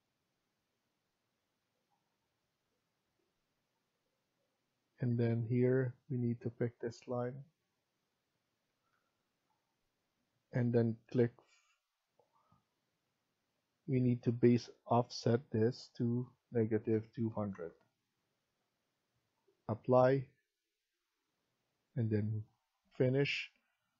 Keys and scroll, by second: 5.1 Escape, 8.6 Escape, 8.8 Escape, 16.8-18.1 typing.